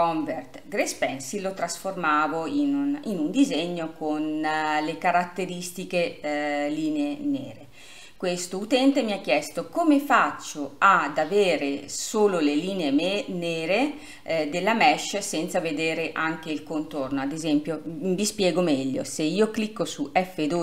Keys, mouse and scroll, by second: 1.1-2.0 drag, 2.0-11.8 middle drag.